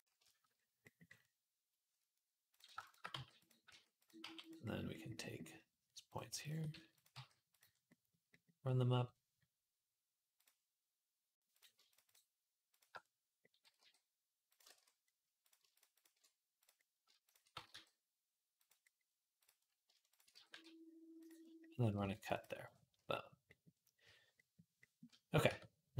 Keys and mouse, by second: 2.6 shift+click, 2.8-5.9 middle drag, 2.9 g, 3.5 s, 4.0 g, 5.9 click, 5.9 shift+middle click, 6.2 shift+click, 6.3-12.5 shift+middle drag, 6.5 s, 6.9 g, 10.2-11.4 drag, 11.7 click, 11.7 shift+a, 12.5 click, 12.7-15.2 middle drag, 13.4 g, 14.5 ctrl+z, 15.2 click, 15.4 shift+middle click, 15.5 click, 15.5 shift+a, 16.4 click, 17.1 click, 17.3 g, 17.4-19.9 middle drag, 19.9 shift+click, 20.0-21.5 middle drag, 20.1 g, 21.5-23.4 ctrl+drag, 21.8 ctrl+r, 23.4-25.9 middle drag, 25.3 Tab.